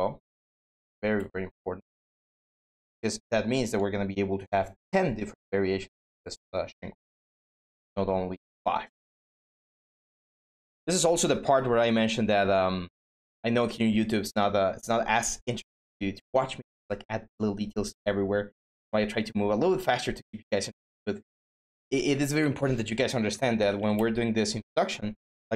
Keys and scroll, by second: 22.8-24.0 typing.